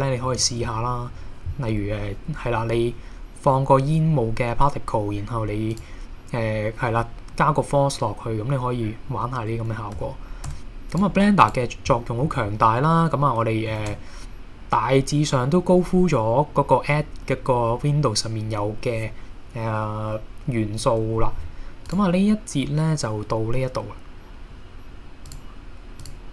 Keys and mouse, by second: 5.7 click, 10.0 a, 10.5 x, 11.4 click, 12.0 middle click, 12.5 KP_1, 13.8 shift+a, 21.9 click.